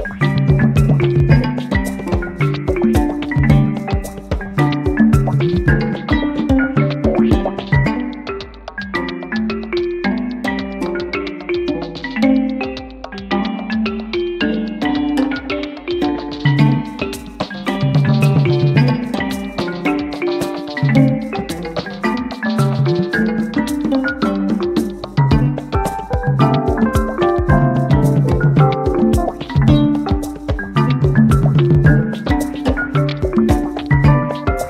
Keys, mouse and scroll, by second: 0.1-1.5 ctrl+drag, 3.0 click, 4.9 click, 6.2-7.6 ctrl+drag, 9.8-11.7 ctrl+shift+drag, 20.5 click, 21.7 click, 23.0 click, 24.6-26.2 drag, 26.3 click, 33.6 click, 34.5 click.